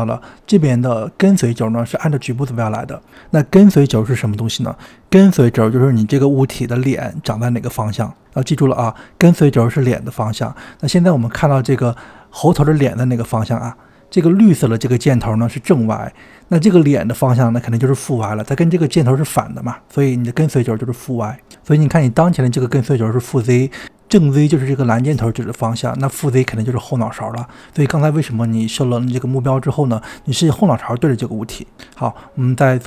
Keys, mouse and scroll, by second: 21.7 click, 26.6-31.9 middle drag, 31.9 click.